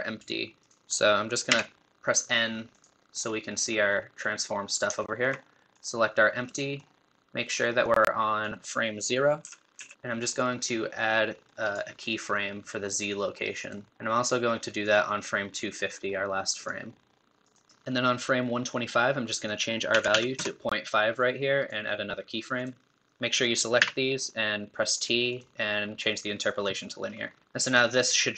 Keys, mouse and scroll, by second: 0.6 click, 1.5 n, 2.7-5.0 drag, 5.0-5.7 shift+middle drag, 5.7 click, 6.5-7.9 middle drag, 7.9-14.6 drag, 15.0-28.3 drag.